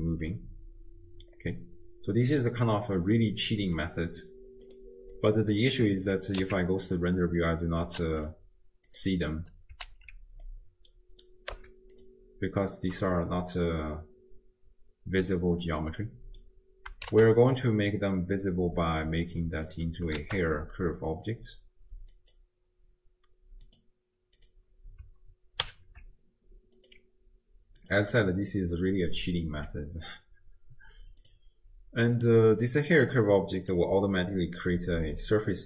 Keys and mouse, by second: 0.3 space, 0.5-1.4 drag, 3.8 middle click, 3.9 click, 4.0 middle click, 5.3 click, 6.4 z, 8.1 alt+q, 9.0 drag, 10.0 alt+q, 10.6 middle click, 11.5 z, 15.9 middle click, 17.1 shift+a, 19.7 click, 20.3 shift+a, 23.7 click, 25.6 alt+p, 27.8 click, 31.3 click, 32.2 click.